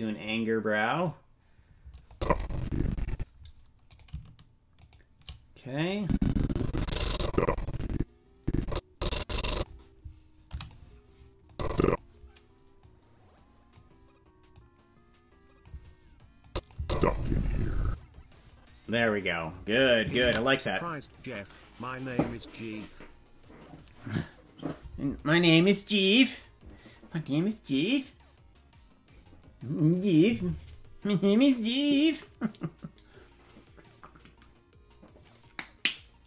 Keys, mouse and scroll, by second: 0.0 click, 0.9 click, 2.1-3.2 drag, 4.1-6.0 right drag, 6.0-9.7 drag, 10.5 i, 11.5 click, 12.8-13.8 drag, 14.5-15.7 drag, 16.4 click, 16.7 space, 17.8 space, 22.5 ctrl+s.